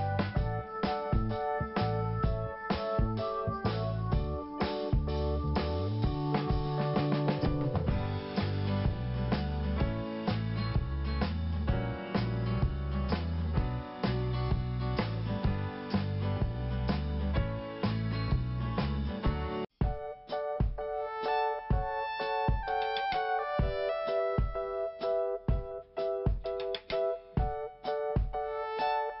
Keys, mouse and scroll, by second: 0.6 click, 6.9 click, 7.8 click, 9.0 scroll down 1, 10.7 click, 11.8 click, 14.0-14.7 scroll down 1, 15.2 click, 15.3 click, 15.8 click, 15.9 click, 16.6 click, 18.8 scroll down 1, 19.6 5, 21.8 click, 23.1 click, 23.2 click, 24.2 click, 24.7 scroll down 1, 25.3 scroll up 1, 26.4 click, 26.5 click.